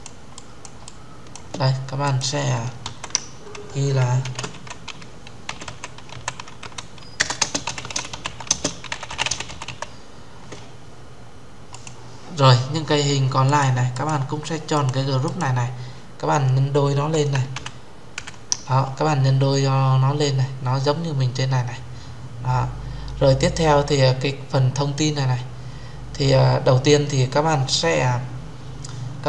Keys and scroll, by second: 2.6 ctrl+a, 6.9 Return.